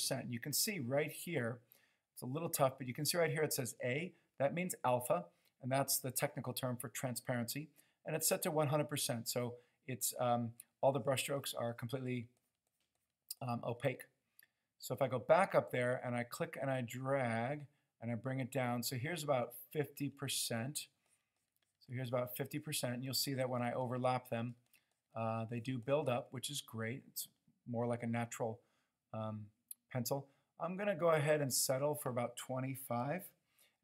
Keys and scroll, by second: 33.2 typing.